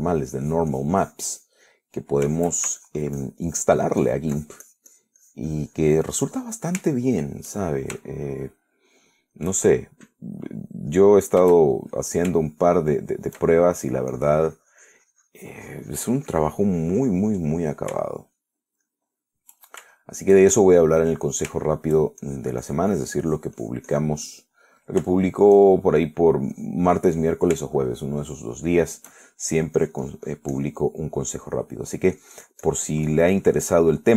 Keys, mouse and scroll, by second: 0.4 KP_Add, 1.7-2.9 drag, 3.5 shift+middle click, 4.0-7.4 ctrl+shift+drag, 7.5 ctrl+shift+middle click, 8.1 shift+right click, 9.3 shift+middle click, 11.0 shift+right click, 12.3 middle click, 12.7 shift+middle click, 13.2-14.3 shift+drag, 14.3 shift+middle click, 15.4-18.5 shift+drag, 18.6 middle click, 19.3 shift+middle click, 20.1 shift+middle click, 21.2 shift+middle click, 22.0 shift+middle click, 22.9 shift+middle click, 23.5-25.5 shift+drag, 25.6 shift+middle click, 26.3-27.5 shift+middle drag, 27.8 click, 29.0 shift+middle click, 29.9 shift+middle click, 30.7-32.1 shift+drag, 32.1 middle click, 32.8 middle click, 33.5-34.1 drag.